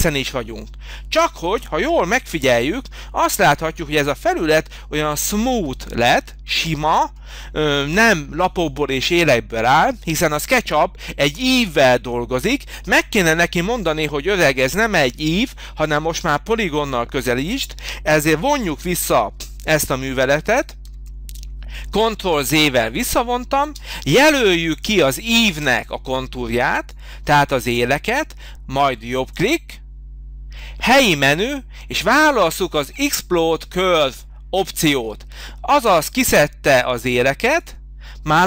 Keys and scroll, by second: 20.8 ctrl+z, 23.7 space.